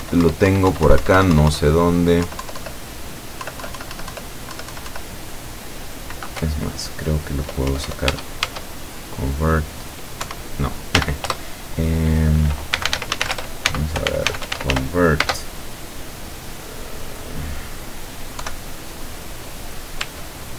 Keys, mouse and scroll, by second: 2.3 Down, 3.5 Down, 6.4 BackSpace, 8.1 Tab, 10.2 Escape, 11.0 n, 11.3 Return, 12.6-15.3 typing, 20.1 Tab.